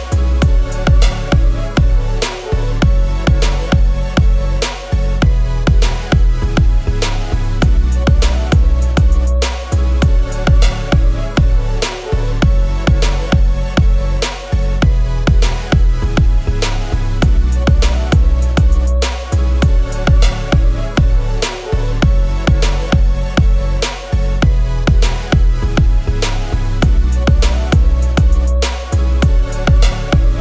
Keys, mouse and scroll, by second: 1.7 shift+click, 2.6 alt+click, 7.9 BackSpace, 12.4 i, 16.0 shift+click, 17.8 shift+click, 25.3 alt+click, 27.0 double click, 28.1 BackSpace, 28.7-29.3 scroll, 29.9 scroll, 29.9 ctrl+z.